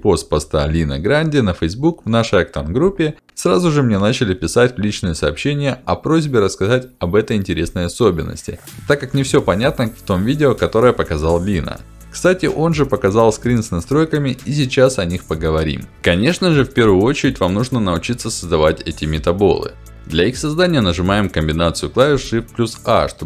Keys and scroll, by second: 21.6 shift+a.